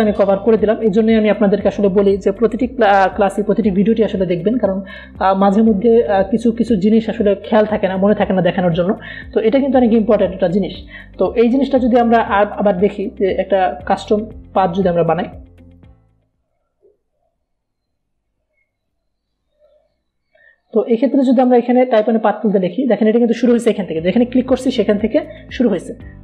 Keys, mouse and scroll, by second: 12.2 click, 13.3 v, 13.7 click, 14.4 Delete, 15.4-20.3 drag, 21.1 v, 22.2 click.